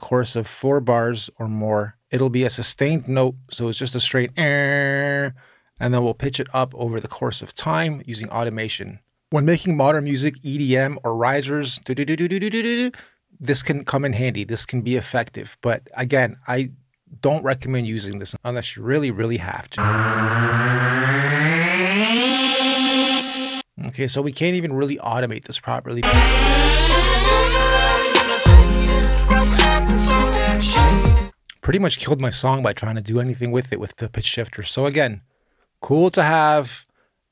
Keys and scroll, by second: 22.8 space, 31.3 BackSpace.